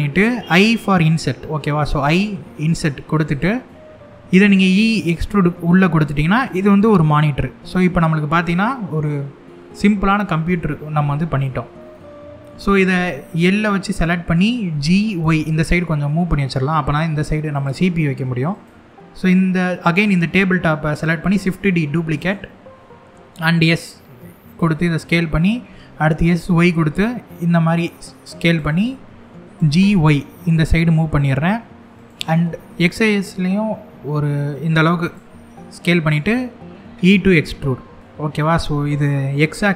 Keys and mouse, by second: 1.5 i, 3.0 click, 3.3 middle click, 4.4 e, 5.7 click, 6.5-10.2 middle drag, 11.5 middle click, 13.5 l, 14.3 g, 14.9 y, 17.2 click, 18.2 click, 20.9 shift+d, 21.8 right click, 22.9 s, 24.1 click, 25.3 s, 26.0 y, 28.1 click, 29.2 g, 29.5 y, 31.6 click, 32.1 s, 32.4 x, 34.7 click, 35.1 middle click, 36.5 e, 39.1 l.